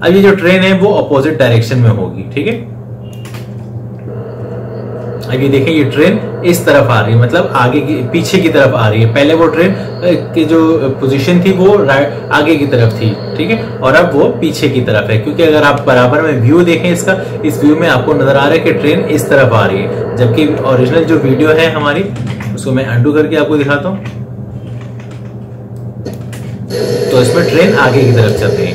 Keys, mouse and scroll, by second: 2.3 click, 3.2 space, 21.3 space, 22.1 ctrl+z, 23.8 ctrl+z, 25.6 click, 26.2 space.